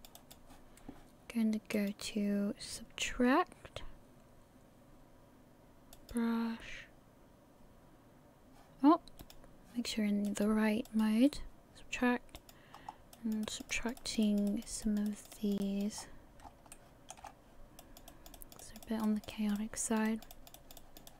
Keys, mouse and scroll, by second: 10.3 click, 12.7 scroll up 4, 13.2 click, 13.4 click, 13.7 click, 14.0 click, 14.8 click, 15.1 click, 15.3 click, 15.6 click, 16.0 scroll up 3, 16.4 scroll down 3, 16.7 shift+middle click.